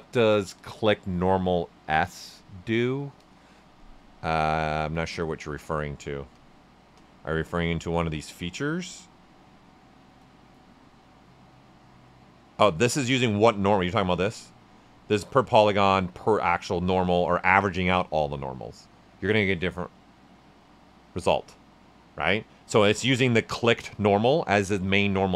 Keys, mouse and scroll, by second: 4.1 right click, 6.3 space, 11.6 space, 14.7 space.